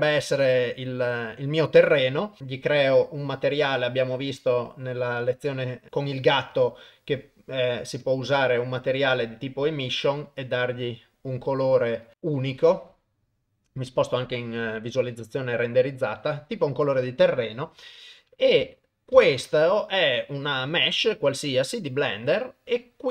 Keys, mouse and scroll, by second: 0.2 KP_0, 2.4-5.1 drag, 5.1-6.5 middle drag, 6.5-8.3 drag, 8.3-8.7 middle drag, 9.8 click, 13.9 click, 17.8 KP_0, 18.8 ctrl+middle click, 19.2 ctrl+s, 19.5 middle click, 21.1 middle click.